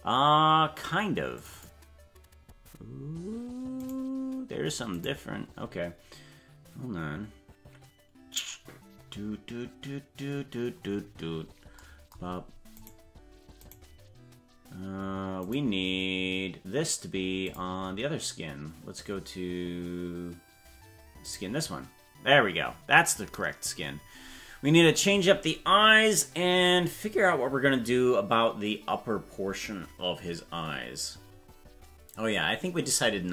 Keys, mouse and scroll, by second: 5.0 right click, 11.3-11.8 scroll up 4, 12.8 right click, 15.5 right click, 17.4 click.